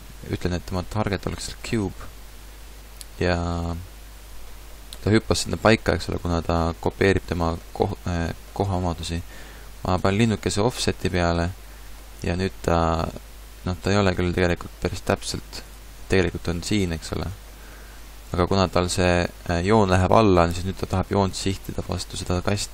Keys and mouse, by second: 2.5-8.1 middle drag, 11.8-15.6 middle drag.